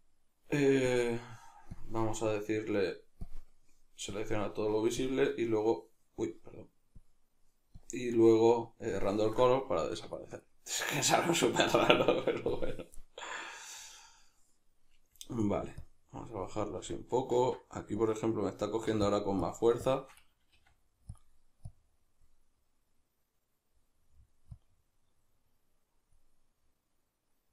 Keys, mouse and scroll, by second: 9.7-12.5 middle drag, 12.5-21.2 drag, 17.6 ctrl+z, 20.6 f, 22.8-24.0 drag, 24.0-25.6 middle drag, 25.6-27.5 drag.